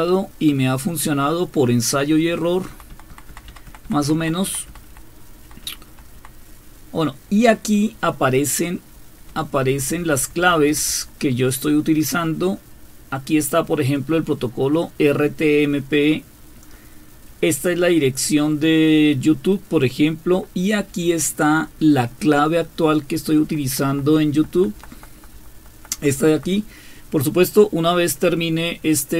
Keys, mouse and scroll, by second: 2.7 Down, 2.9 Down, 3.1 Down, 3.3 Down, 3.5 Down, 3.7 Down, 3.8 Down, 4.0 Down, 4.2 Down, 4.4 Down, 4.7 Down, 4.9 Down, 5.4 Down, 5.6 Down, 5.9 Down, 6.1 Down, 9.3 Up, 9.7 Up, 9.9 Up, 10.1 Up, 10.3 Up, 10.5 Up, 10.7 Up, 11.8 Right, 12.5-13.5 Right, 15.7-16.7 Right, 17.3-18.1 Right, 19.3-20.4 Right, 20.8 Right, 21.0 Right, 23.2 Right, 23.4 Right, 23.9 Right, 24.1 Right, 24.3 Right, 24.6 Right, 24.9 Right, 25.1 Right, 25.7 Right, 26.0-26.5 Right.